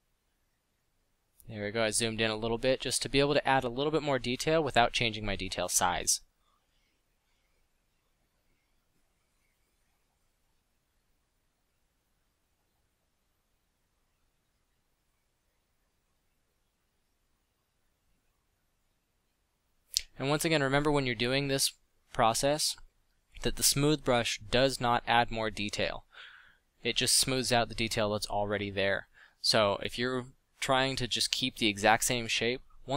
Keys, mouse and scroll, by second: 1.0 f, 2.5 f, 5.7 f, 8.0 f, 9.0 f, 10.4 f, 13.7 f, 15.8 f, 24.0 middle click, 31.1 click.